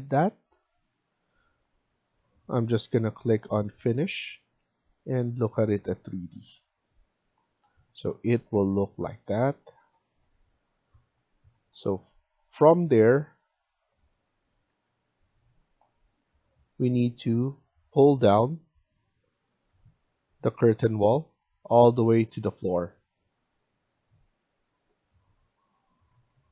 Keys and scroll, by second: 8.2 Escape, 8.4 Escape, 14.6 Escape, 19.6 Escape, 26.0 Escape.